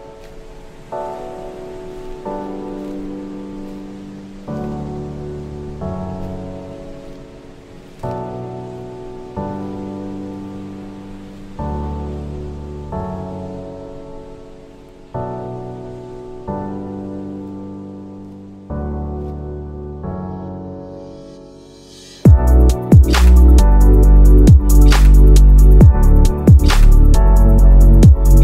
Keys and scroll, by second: 5.1 space, 24.9 ctrl+z.